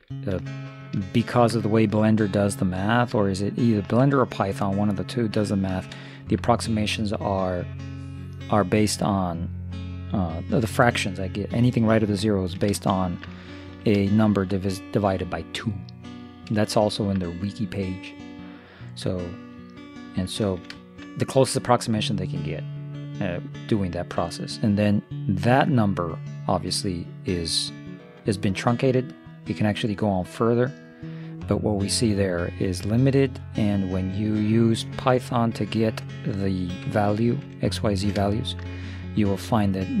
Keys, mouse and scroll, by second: 4.4-6.3 middle drag, 12.3-16.2 middle drag, 20.6-23.1 middle drag, 25.7-27.5 drag, 37.7-40.0 middle drag.